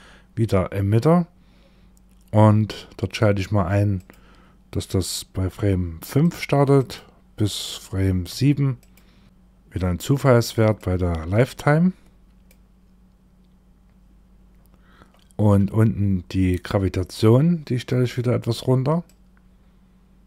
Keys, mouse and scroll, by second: 1.1-1.4 scroll down 2, 3.4 click, 6.2 click, 9.2 click, 10.2 click, 14.6-16.4 scroll down 26, 16.4-17.3 scroll down 4, 17.3-18.5 scroll down 6, 18.5 click, 18.5-19.5 scroll up 3.